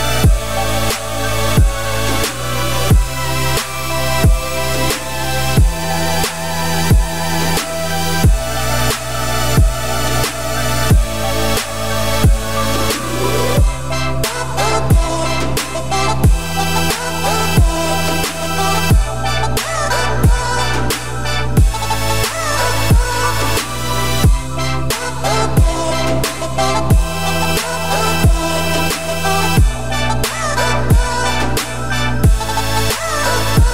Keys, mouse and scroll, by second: 2.2 click, 2.8 click, 3.5 shift+click, 5.1-5.7 middle drag, 5.7 z, 6.1-6.5 middle drag, 6.5 z, 7.6 ctrl+z, 7.8 ctrl+z, 8.2 ctrl+z, 8.5 ctrl+z, 9.2-10.2 middle drag, 10.2 click, 10.8 click, 11.7-14.7 drag, 16.5-18.4 drag, 18.4-19.0 middle drag, 19.0-19.9 scroll down 2, 19.9 click, 21.3-23.6 drag, 23.6 shift+middle click, 24.6 click, 25.8-26.2 scroll up 2, 26.2-26.7 middle drag, 26.7-27.8 right drag, 27.8-29.2 middle drag, 29.2 click, 29.7-30.8 drag, 31.1-31.8 scroll up 6, 31.8 click, 32.0 scroll down 5, 32.2-33.7 middle drag.